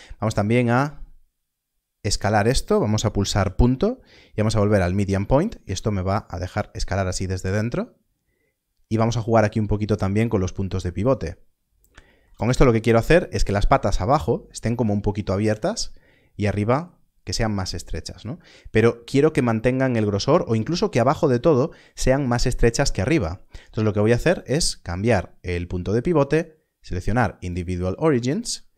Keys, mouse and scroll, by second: 0.7 click, 2.0 right click, 4.6 click, 11.0 click, 27.1 click.